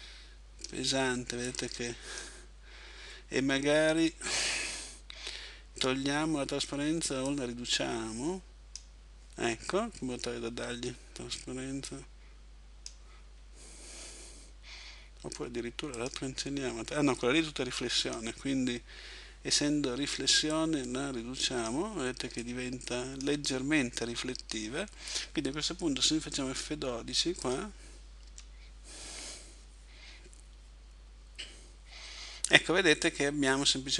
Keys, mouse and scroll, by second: 7.3 click, 11.9 click, 16.0 click, 20.6 click.